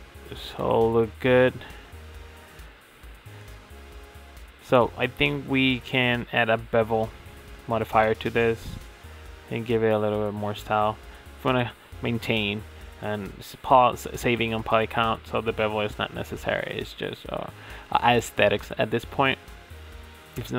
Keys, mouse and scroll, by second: 1.2-2.5 middle drag, 2.7-7.4 middle drag, 7.4-7.8 drag, 7.8-9.8 middle drag, 10.1 middle click, 11.1-11.5 middle drag, 15.7 middle click, 17.5-18.0 middle drag.